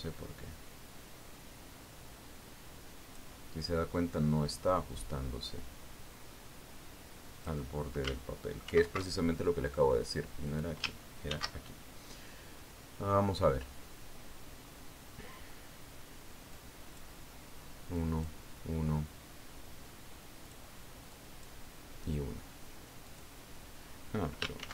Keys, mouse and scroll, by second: 0.7-4.9 drag, 5.6-9.3 drag, 10.1 ctrl+shift+f, 11.9 click, 12.8 ctrl+shift+d, 18.0 click, 19.4 click, 22.0 click, 22.6 click, 24.6 click.